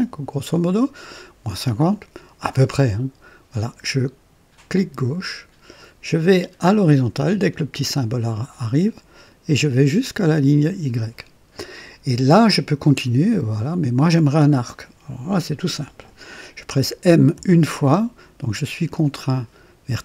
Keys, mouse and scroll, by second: 4.7 click, 10.6 click, 17.3 m.